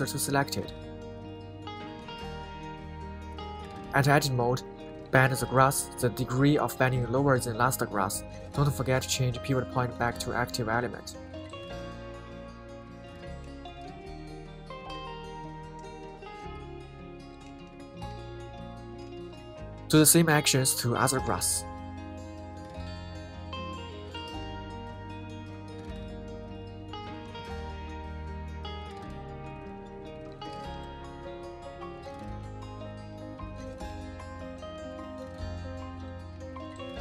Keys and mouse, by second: 2.8 Tab, 4.4-6.0 drag, 6.2 KP_3, 7.2 g, 7.7 Escape, 8.7-10.6 drag, 11.3 g, 13.1 Escape, 13.4 g, 13.8 y, 21.1 Escape, 21.3 Escape, 22.8 g, 23.5 shift+x.